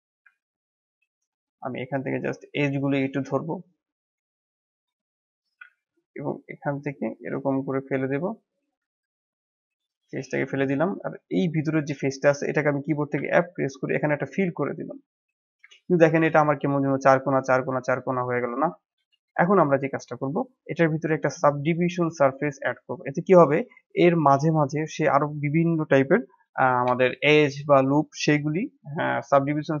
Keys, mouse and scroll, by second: 0.2 ctrl+z, 1.2 middle click, 1.6 click, 3.0-4.1 drag, 4.4-5.7 middle drag, 5.7 e, 8.0-8.7 scroll up 1, 8.7 x, 10.1 middle click, 11.1 alt+click, 11.6-13.1 middle drag, 13.1 f, 13.6-15.4 middle drag, 15.4 KP_1, 16.1 scroll down 1, 16.6-19.1 middle drag, 19.1 KP_1, 19.9 Tab, 21.6-22.4 drag, 23.1-25.2 drag, 25.2-26.3 middle drag, 26.3 n, 26.6-26.9 scroll up 1, 26.9-29.8 shift+middle drag.